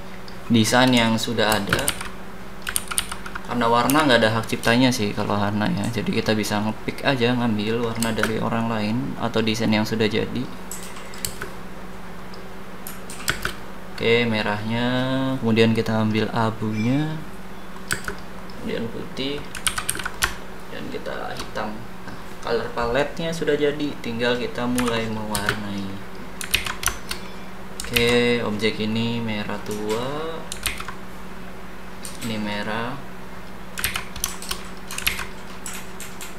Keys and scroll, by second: 1.6 space, 2.7 ctrl+d, 3.8 e, 8.0 space, 11.2 space, 13.2 space, 17.9 space, 19.6 ctrl+c, 20.1 v, 24.7 h, 25.6 space, 26.5 ctrl+z, 27.9 ctrl+z, 30.6 ctrl+z, 33.8 ctrl+z, 35.0 ctrl+z.